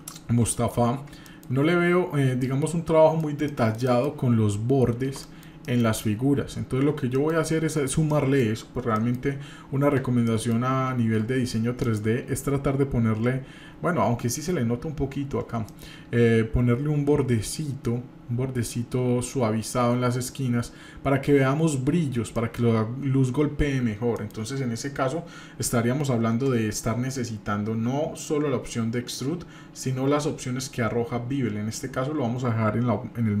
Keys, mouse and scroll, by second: 0.9-1.3 scroll up 2, 1.3 shift+middle click, 2.0 scroll down 1, 2.4-4.3 shift+middle drag, 5.2 shift+middle click, 5.5 shift+scroll down 1, 5.6-6.2 shift+middle drag, 6.7 scroll down 1, 7.2 shift+middle click, 8.1 shift+middle click, 10.3 shift+middle click, 11.8 shift+middle drag, 12.2-14.9 scroll up 1, 15.7 shift+middle click, 22.4 shift+middle click, 22.7-23.8 scroll down 2, 24.2-24.5 shift+middle drag, 26.7 scroll down 1, 27.3 scroll down 2.